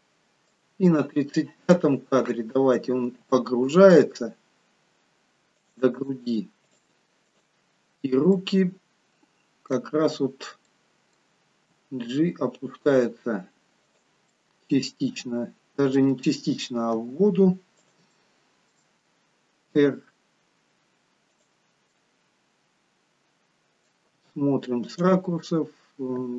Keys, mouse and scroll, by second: 0.5 click, 3.0 g, 6.7 click, 7.4 click, 8.4 middle click, 10.7 middle click, 11.5 g, 14.3 middle click, 17.0 g, 18.2 middle click, 19.8 r, 21.9 middle click, 24.1 r, 26.2 g.